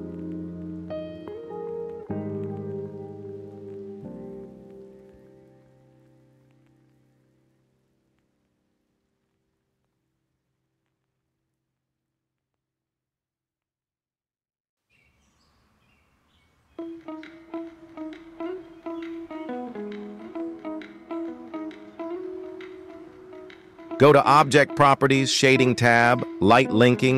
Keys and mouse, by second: 0.6 g, 3.3 z, 3.3 z, 3.4 z, 3.7-4.2 middle drag, 5.2 click, 12.9 middle click, 13.3 g, 15.0 y, 15.1 y, 18.4-19.9 shift+drag, 21.3 click.